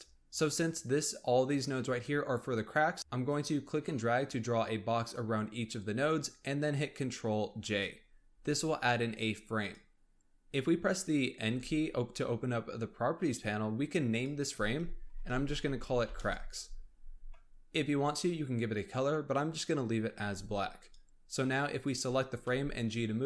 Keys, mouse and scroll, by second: 2.2-3.0 scroll up 1, 3.2 click, 7.4 ctrl+j, 8.2 click, 9.5 click, 11.4 n, 14.0-17.1 drag, 17.4-20.2 scroll up 1, 20.2 n, 20.8 click, 21.7 click, 22.1-22.4 scroll down 1, 22.4 g.